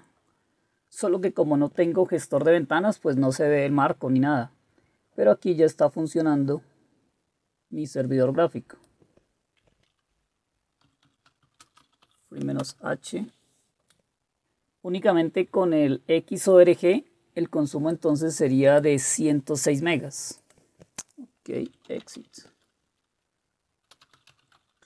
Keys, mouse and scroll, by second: 10.6-12.5 typing, 12.6 Return, 21.5-22.7 typing, 23.7-24.8 typing.